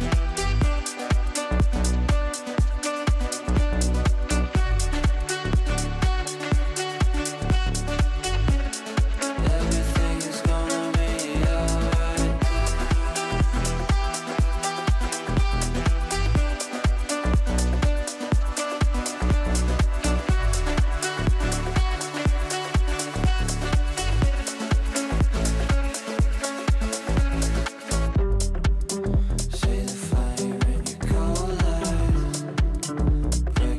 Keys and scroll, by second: 12.2 g, 25.4 ctrl+g, 26.3 KP_Add, 31.0 e, 32.2 ctrl+z, 32.6 r.